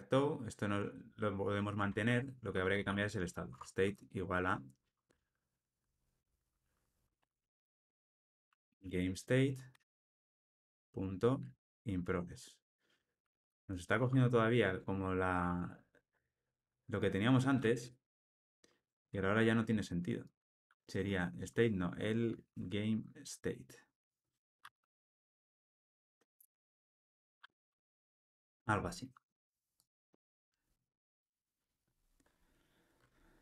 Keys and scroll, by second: 3.5 Tab, 15.3 Tab, 18.0 Tab, 19.0 Return, 25.8 Return, 27.9 Return, 28.2 ctrl+alt+o.